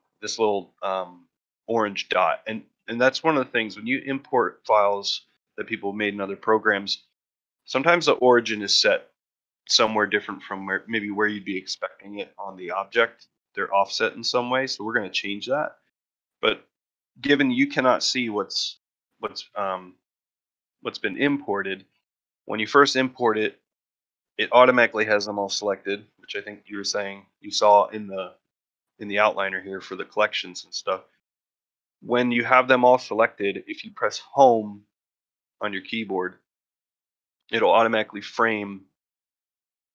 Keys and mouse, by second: 2.3 ctrl+middle drag, 2.8 shift+middle drag, 3.1 ctrl+middle drag, 3.5 shift+middle drag, 3.8 ctrl+middle drag, 4.1 shift+middle drag, 7.8-8.2 middle drag, 14.5 middle drag, 15.0-15.5 middle drag, 15.8 shift+middle drag, 35.1 Home, 37.5-38.6 middle drag.